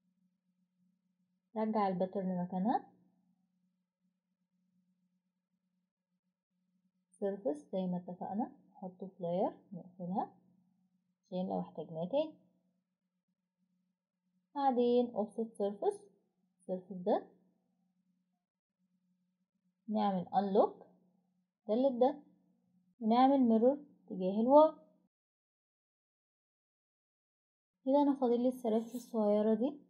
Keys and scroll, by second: 2.4-3.5 typing, 8.1-8.9 typing, 10.7 Delete, 18.2 Escape.